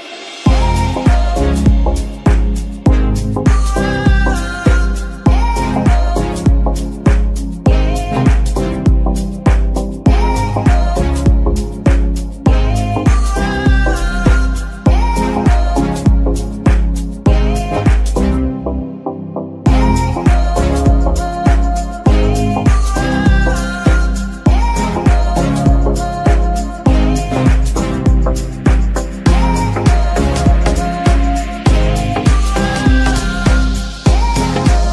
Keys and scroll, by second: 0.8 shift+Tab, 1.7 g, 2.1 Escape, 2.4 Tab, 7.6 alt+shift+s, 8.8 Tab, 9.3 Tab, 10.2 shift+s, 11.8 Tab, 14.4 shift+Tab, 16.5 shift+s, 17.8 shift+Tab, 20.5 g, 20.9 Escape, 21.4 s, 23.9 KP_3, 28.9 Tab, 31.1 shift+s, 33.3 Tab, 34.5 shift+d.